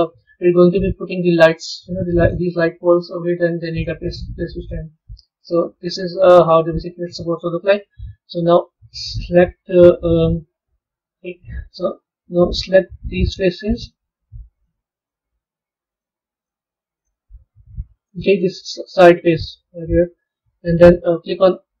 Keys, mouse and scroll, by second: 0.0-2.3 middle drag, 4.3 middle click, 9.3 scroll up 2, 10.0-11.7 middle drag, 13.1 click, 13.7 shift+click, 14.4 shift+click, 14.9 shift+click, 15.8 shift+click, 16.3 shift+click, 16.9 shift+click, 17.4-17.8 scroll down 2, 17.8-19.2 middle drag, 19.2-19.6 scroll down 1, 20.7-21.8 scroll down 1.